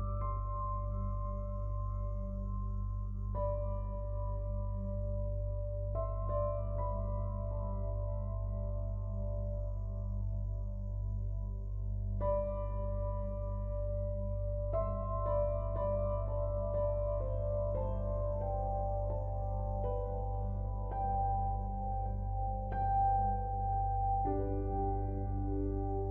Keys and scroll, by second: 22.4 ctrl+u.